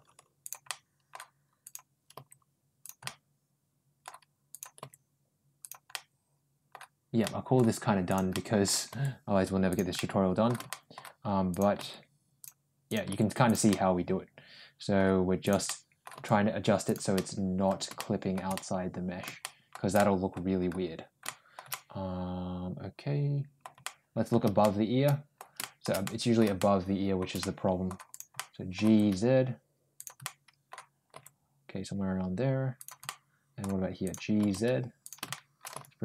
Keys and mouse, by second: 0.5 shift+middle click, 1.5 shift+click, 2.0 shift+g, 2.9-3.9 middle drag, 4.3 click, 4.6 g, 5.7 middle click, 7.1 middle click, 7.9 click, 8.2 middle click, 9.5 g, 9.8 middle click, 10.5 middle click, 11.3 click, 11.6 g, 12.7 click, 12.9 g, 13.5-14.8 middle drag, 15.3 click, 15.5 middle click, 16.0 g, 17.0 middle click, 17.8 shift+middle click, 18.4 middle click, 19.2 middle click, 19.8 middle click, 21.1 shift+middle click, 21.5-23.5 middle drag, 23.7 middle click, 24.4 shift+middle click, 25.4 shift+middle click, 25.9 middle click, 26.4 shift+middle click, 27.2 middle click, 27.9 click, 28.2 middle click, 28.7 g, 30.1 middle click, 31.0 g, 32.9 middle click, 33.9 click, 34.2 g, 35.1 middle click, 35.6 g.